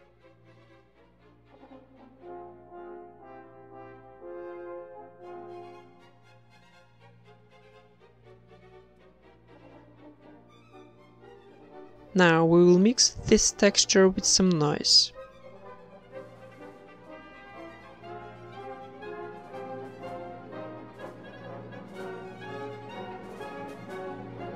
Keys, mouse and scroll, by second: 0.3 Tab, 2.7 KP_0, 3.0 z, 3.5 ctrl+s, 4.7 click, 6.1 shift+a, 9.3 click, 11.2-12.4 drag, 12.4-16.3 middle drag, 12.4 a, 12.4 b, 12.4 g, 13.8 g, 16.3 click, 16.3 shift+d, 17.7 click, 18.7 click, 22.1 middle click, 22.6-23.8 drag, 23.0 shift+a.